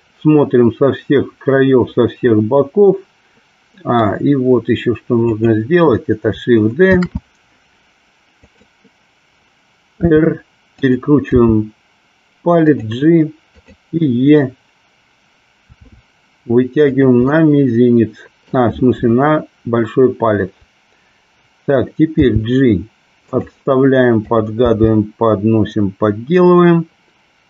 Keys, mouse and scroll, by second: 5.4 click, 7.0 shift+d, 8.5 click, 10.1 r, 10.8 click, 11.4 g, 13.6 click, 15.9 e, 17.0 click, 17.4-18.6 middle drag, 22.2 g, 24.3 click, 24.7 g.